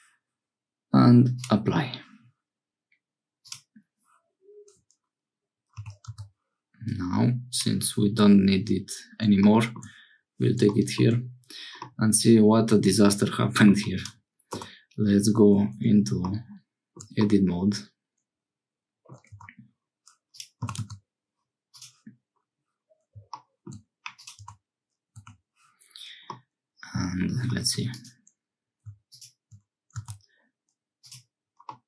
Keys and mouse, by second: 1.4-4.3 drag, 5.8 g, 10.7 shift+middle click, 11.8-13.7 middle drag, 14.6 Tab, 17.2-19.2 middle drag, 19.3 Tab, 20.3 click, 20.6 g, 23.6 shift+middle click, 24.2 middle click, 24.4 Tab, 25.1 1, 26.3 middle click, 27.6 2, 27.9 click, 29.9 x, 31.7-31.8 drag.